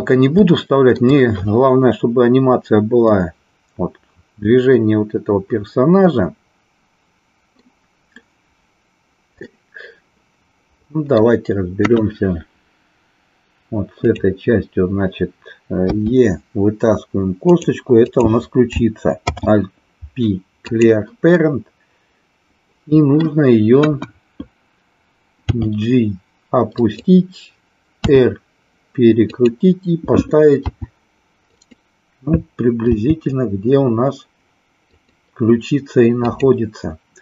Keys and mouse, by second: 0.5 shift+middle click, 3.0-7.5 middle drag, 9.4-11.3 middle drag, 11.7 KP_1, 15.8 e, 17.5 click, 18.1 click, 19.2 alt+p, 21.3-23.3 middle drag, 23.6 KP_1, 25.3 g, 26.9 click, 28.0 r, 29.2 click, 30.7 s, 31.5 click, 33.0 g, 36.2 click.